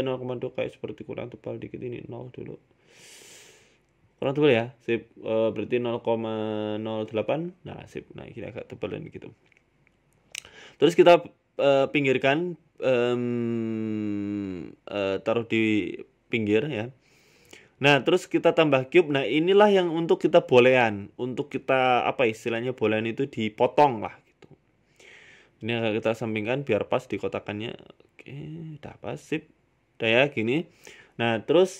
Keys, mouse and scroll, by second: 0.3 shift+middle click, 1.3 click, 2.5 scroll down 6, 2.6 scroll up 1, 2.6 scroll down 1, 3.0 scroll down 1, 3.3 middle click, 3.7 scroll up 1, 4.0 middle click, 5.2 click, 8.2 middle click, 8.6 scroll down 5, 8.6 scroll up 1, 8.8 middle click, 9.4 shift+middle click, 9.6 scroll down 2, 10.0 KP_7, 10.9 g, 13.9 middle click, 14.3 scroll down 3, 14.5 shift+middle click, 14.8 shift+a, 17.3 middle click, 18.2 g, 20.9 middle click, 21.4 scroll down 4, 21.4 scroll up 1, 21.6 middle click, 21.9 scroll down 1, 22.0 scroll up 1, 22.3 KP_1, 22.9 KP_3, 23.3 scroll down 1, 23.3-23.8 scroll up 11, 23.9 shift+middle click, 24.3-25.0 scroll down 1, 25.0-25.3 scroll down 1, 25.8 right click, 26.4 g, 29.3 right click, 29.5 middle click, 31.1 right click.